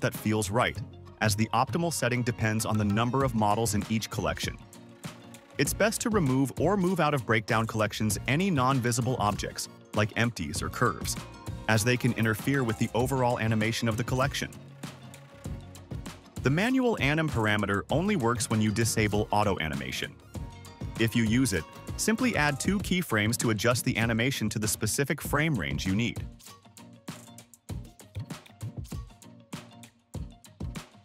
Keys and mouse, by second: 9.9 space, 14.1 space, 17.3 click, 19.2 click, 21.5-24.3 drag, 25.0 click, 26.0 click, 26.6 click, 27.0 click, 27.3 a, 27.5 t, 28.3 drag, 28.9 space, 30.6 space.